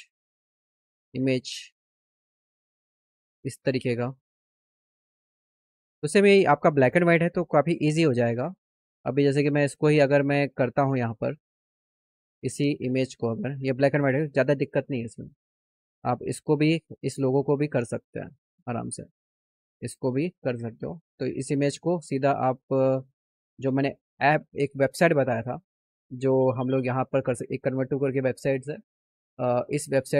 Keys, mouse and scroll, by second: 0.3 right click, 3.5 click, 9.9 click, 11.7 click, 11.9 click, 13.0 click, 17.5 click, 19.7 click, 22.6 click, 23.6 click, 26.3 click, 26.9 click.